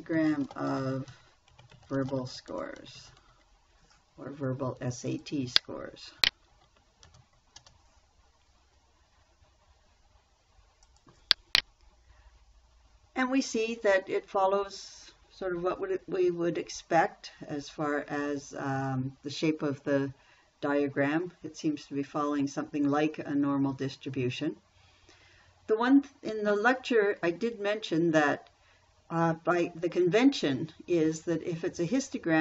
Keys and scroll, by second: 0.2-4.2 typing, 7.5 shift+t, 8.0 space.